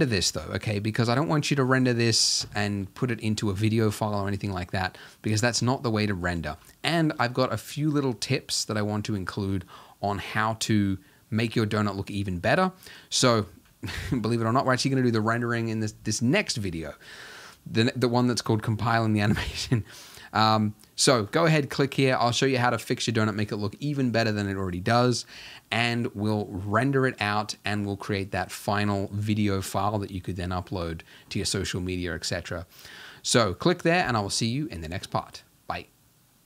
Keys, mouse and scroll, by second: 0.0 Escape, 4.7-5.1 scroll down 1, 5.1-5.7 scroll up 1, 5.7-12.8 ctrl+middle drag, 12.8-13.2 scroll down 1, 13.2-13.9 scroll up 1, 13.9 scroll up 1, 14.0-36.4 ctrl+middle drag.